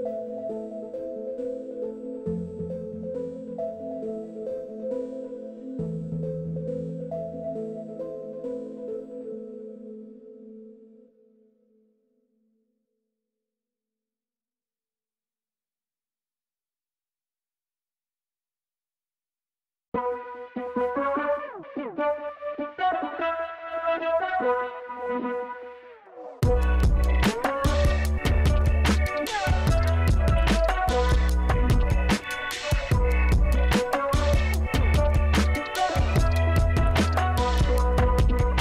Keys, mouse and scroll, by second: 0.0 click, 1.7 click, 3.9 click, 6.3 click, 7.4 middle click, 7.7 middle click, 7.9-9.3 middle drag, 9.8 click, 10.1 click, 10.3 click, 13.2 click, 15.6 click, 17.3 click, 18.3 click, 19.0 KP_5, 19.1 KP_0, 19.3 Return, 20.4 click, 21.0 KP_3, 21.1 KP_5, 21.3 Return, 22.6 click, 23.6 click, 24.4 KP_1, 24.7 KP_0, 25.7 Return, 35.8 click.